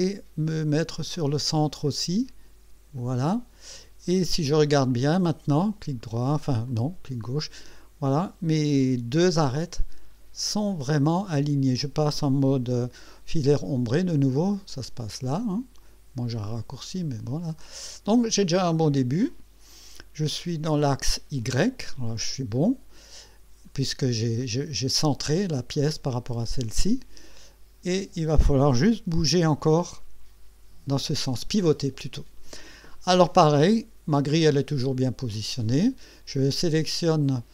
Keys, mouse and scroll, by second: 3.0 click, 5.6 right click, 6.3 click, 6.8-10.9 drag, 14.7 click, 16.4 click, 17.4-17.8 scroll down 1, 18.2-21.0 drag, 22.5-24.4 drag, 26.9-28.4 drag, 29.0 KP_1, 34.5-35.7 right drag.